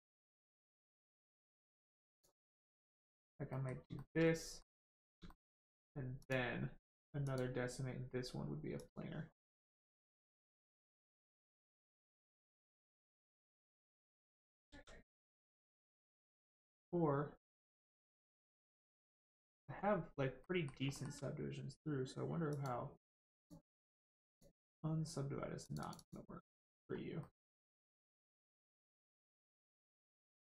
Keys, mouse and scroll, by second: 2.5 middle click, 4.0 shift+middle click, 4.2 middle click, 5.2 shift+middle click, 6.2 click, 9.3 middle click, 10.9 click, 14.6 ctrl+z, 15.1 click, 15.2 click, 15.4 scroll down 1, 15.7 middle click, 16.4 shift+middle click, 18.0 middle click, 18.0 click, 19.4 middle click, 19.6 scroll up 1, 20.4 middle click, 20.9 shift+middle click, 22.5 click, 22.6 click, 25.6 click, 26.9 scroll down 1, 27.2 middle click, 28.2 shift+middle click, 28.6 middle click, 28.6 middle click, 29.9 click.